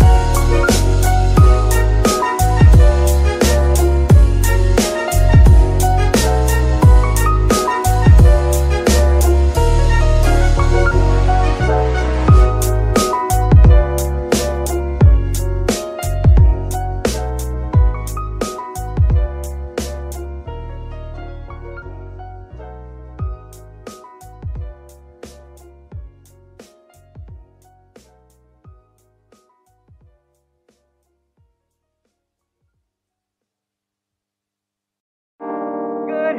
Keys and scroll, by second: 6.0 Escape, 12.4 g, 13.5 s, 14.7 Tab, 15.1 s, 17.4 Tab, 17.9 s, 19.0 Tab, 31.0 F2, 32.9 Right, 33.2-33.9 typing, 34.3 Return, 35.8 z.